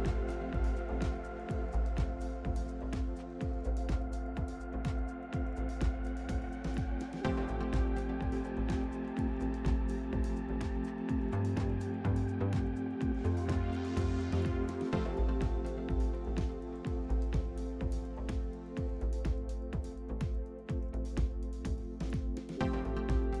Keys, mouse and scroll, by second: 2.2 ctrl+KP_Add, 4.7 click, 5.7-6.0 scroll down 1, 6.0 Tab, 6.4 click, 6.7 scroll down 4, 7.1-9.5 shift+middle drag, 9.5 click, 9.7 scroll up 3, 10.1 Tab, 10.5-11.9 shift+middle drag, 11.9-13.3 scroll up 3, 13.3-14.6 shift+middle drag, 14.6-15.3 scroll up 3, 20.4 click, 21.3-22.8 shift+middle drag.